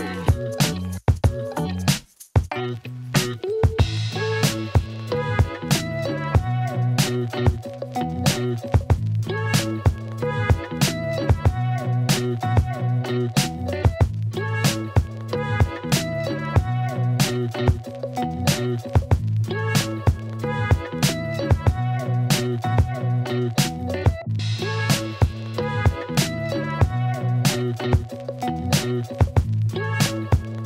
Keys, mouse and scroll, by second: 0.0-1.6 drag, 1.6 g, 1.6 y, 7.8-10.2 drag, 10.3-11.4 alt+middle drag, 12.1 Tab, 13.0 alt+click, 13.4 KP_1, 18.5 click, 21.2 ctrl+alt+click, 21.5 ctrl+click, 23.3 z, 27.8-29.9 drag, 30.5 h.